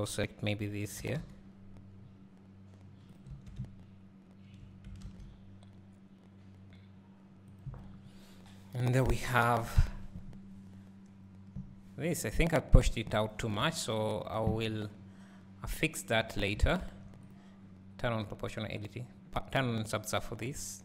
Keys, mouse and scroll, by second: 0.0 click, 1.0 g, 3.3 Tab, 7.8 click, 13.0 scroll up 1, 13.4 scroll down 1, 17.3 click.